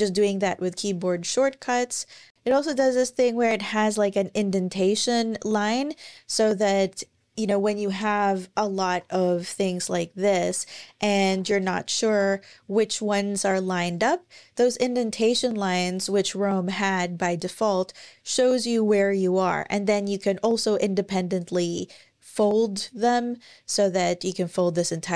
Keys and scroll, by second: 2.4 Tab, 11.7-13.8 typing.